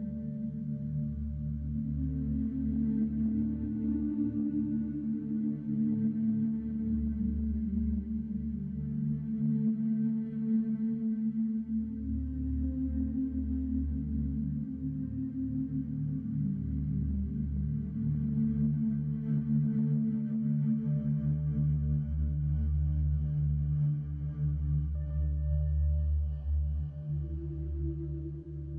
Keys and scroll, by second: 0.4 ctrl+x, 0.5 1, 0.9 m, 1.1 2, 2.4 1, 3.2 m, 3.5 2, 3.8 ctrl+x, 4.4 1, 5.8 m, 6.1 2, 8.5-11.0 typing, 11.2 ctrl+x, 12.4-17.8 typing, 13.7 ctrl+shift+x, 20.2 c, 20.4 alt+z, 20.8 g, 21.2 alt+z, 21.8 j, 22.9 Tab, 23.3 a, 24.0 Tab, 24.3 alt+shift+z, 24.6 alt+shift+z, 25.8 alt+shift+z, 26.2 Tab, 27.0 1, 27.5 2, 28.0 ctrl+shift+x, 28.4 ctrl+shift+x.